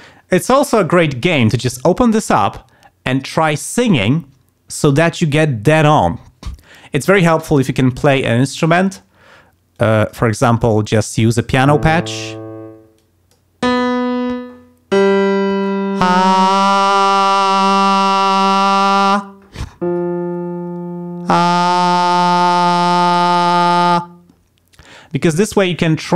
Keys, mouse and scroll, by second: 9.7 click, 10.6 click, 11.1 click, 13.0 click.